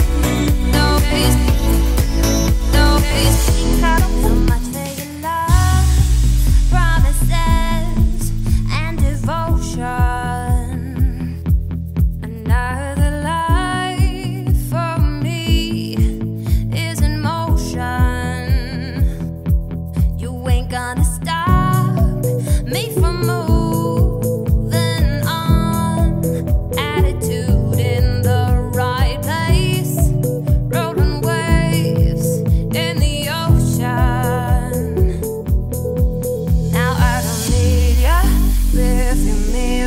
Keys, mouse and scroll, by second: 1.6 Tab, 1.7 scroll down 1, 1.8 middle click, 2.5 Tab, 2.8 a, 3.4 shift+n, 3.6 Tab, 3.8 click, 3.9 Tab, 4.2 a, 4.9 shift+n, 5.4 Tab, 5.6-6.0 middle drag, 6.0 click, 6.4 shift+click, 7.3 ctrl+KP_Divide, 8.1 ctrl+s, 8.2-9.0 scroll up 4, 9.0-9.4 middle drag, 9.4 ctrl+s, 9.7 click, 11.0 click, 12.1 Tab, 12.8 a, 13.2 scroll up 1, 13.5 alt+e, 16.3 Tab, 16.5 scroll down 1, 16.5 middle click, 16.9 Tab, 17.1 a, 17.9 shift+n, 18.2 Tab, 18.6 middle click, 19.3 ctrl+z, 19.5 ctrl+z, 19.9 ctrl+z, 20.3 ctrl+z, 20.7 ctrl+z, 21.8 Tab, 21.9 scroll down 4, 22.1-23.7 middle drag, 23.7 scroll down 2, 23.9-27.0 middle drag, 29.1 scroll down 4, 29.3-30.2 middle drag, 30.2 scroll up 3, 30.5 scroll down 1, 30.5-31.8 middle drag, 31.8 click, 32.1 shift+middle drag, 32.4 scroll up 1, 32.6-33.2 middle drag, 33.2-33.6 scroll down 1, 33.6 Tab, 33.8-34.1 scroll up 2, 34.1 shift+middle click, 34.9 click, 35.7 alt+click, 36.5-37.7 middle drag, 37.7 shift+d, 38.7-39.0 scroll down 2, 39.0 p, 39.7 Tab.